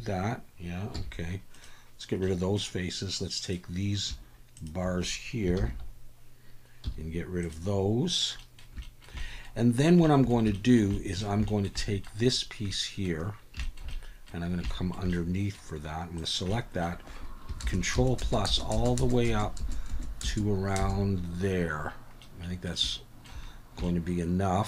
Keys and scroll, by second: 0.9 x, 5.6 ctrl+l, 6.8 x, 17.6 ctrl+KP_Add, 17.9 ctrl+KP_Add, 18.2 ctrl+KP_Add, 18.5 ctrl+KP_Add, 21.2 ctrl+KP_Add.